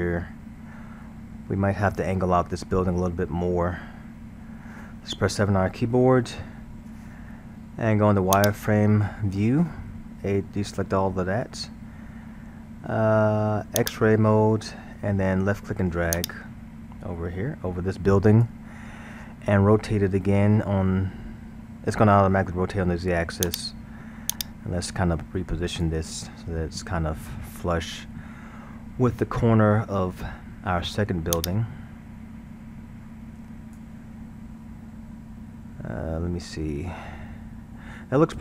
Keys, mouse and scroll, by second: 3.4-5.8 scroll, 5.9 KP_7, 8.4 click, 10.8 a, 13.8 click, 16.2 drag, 20.7 r, 24.3-26.2 drag, 26.2 scroll, 31.4 click, 36.4-38.4 middle drag.